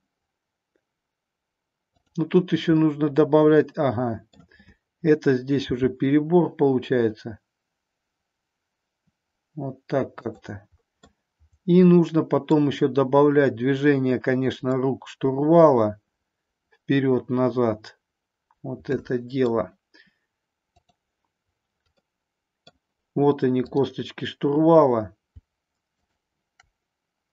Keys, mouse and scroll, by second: 1.8 click, 2.7-4.2 middle drag, 4.2 scroll down 1, 4.3 middle click, 5.7 g, 10.2 click, 11.1-12.5 middle drag, 14.7-19.5 middle drag, 20.7 click, 22.0 middle click, 22.7 scroll down 1, 26.0-27.2 shift+drag.